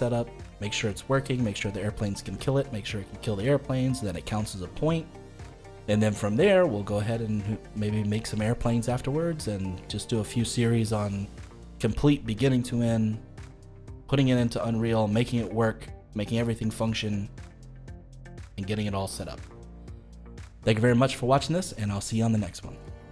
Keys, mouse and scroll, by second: 9.5-14.5 middle drag, 14.5-17.6 middle drag, 18.6-23.1 middle drag.